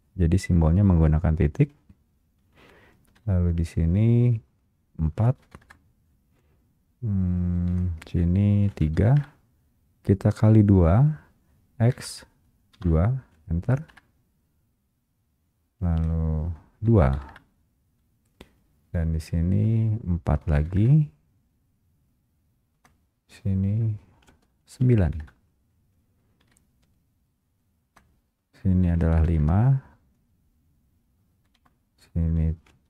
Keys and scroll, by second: 3.2 Return, 3.2 Escape, 5.8 Return, 7.8 Return, 9.2 Return, 14.0 Return, 17.4 Return, 19.6 Return, 25.4 Return, 26.6 Escape, 31.6 Return.